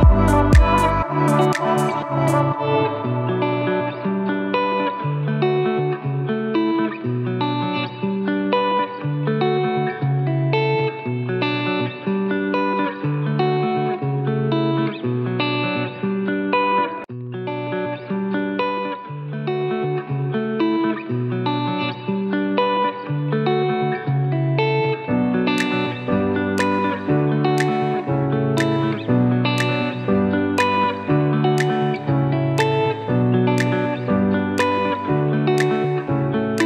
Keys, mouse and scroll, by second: 0.6-12.9 alt+shift+drag, 19.1 alt+shift+click, 20.6-29.6 alt+drag, 29.6 alt+shift+z, 30.5 click, 31.6-33.3 typing, 31.8 click, 32.5 click, 32.8 click, 33.1 click, 33.5-36.6 drag.